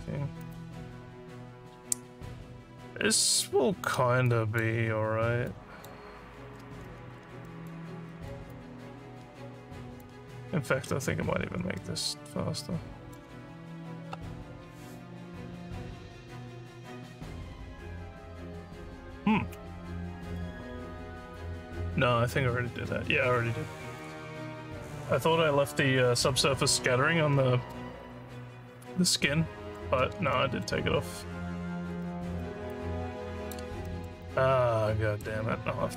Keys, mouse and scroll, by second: 0.4 click, 4.2 click, 5.5 click, 7.1 alt+scroll up 1, 7.5 alt+middle click, 8.1 alt+middle click, 8.5-10.0 alt+drag, 10.3 z, 11.8-13.1 alt+middle drag, 30.4 alt+middle click, 31.4 alt+scroll down 1, 32.0 alt+middle click, 32.8 alt+click, 33.9 alt+middle click, 34.3 alt+click.